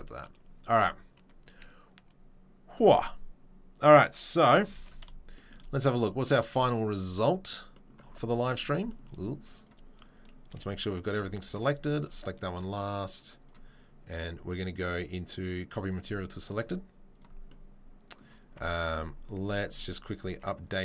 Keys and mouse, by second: 4.9 ctrl+s, 7.2-20.8 middle drag, 9.6 click, 10.0 click, 11.1 a, 14.3-17.3 drag, 20.7 Tab.